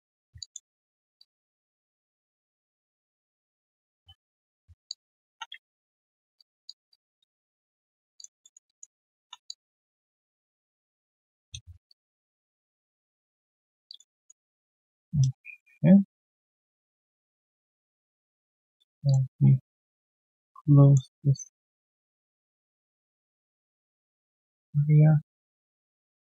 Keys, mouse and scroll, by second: 0.4 alt+click, 1.1 alt+middle click, 1.6 right click, 2.1 alt+middle click, 2.7-3.5 typing, 4.6 scroll down 1, 4.8 alt+click, 5.2 typing, 5.7 alt+right click, 6.3 alt+click, 6.6 alt+click, 8.1 alt+click, 8.4 alt+middle click, 8.6 alt+click, 8.9 alt+right click, 9.2 1, 9.4 alt+click, 10.4 right click, 11.3 right click, 11.8 ctrl+shift+click, 13.8 alt+click, 14.1 alt+middle click, 14.3 q, 14.6 alt+click, 15.4 ctrl+shift+x, 17.0 ctrl+click, 17.5 alt+click, 18.1 alt+click, 18.4 right click, 18.8-20.0 typing, 20.1 ctrl+shift+click, 21.0 ctrl+shift+click, 22.6 ctrl+shift+click, 24.1 ctrl+shift+click, 25.0 ctrl+shift+click.